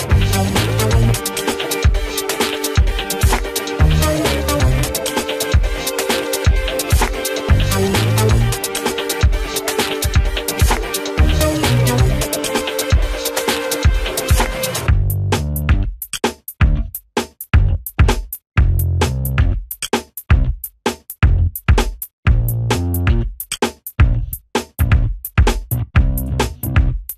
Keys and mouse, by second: 4.9 click, 7.8 click, 14.9 ctrl+space, 15.5 click, 16.8 Delete, 18.0 click, 24.0 right click, 24.9-27.1 drag.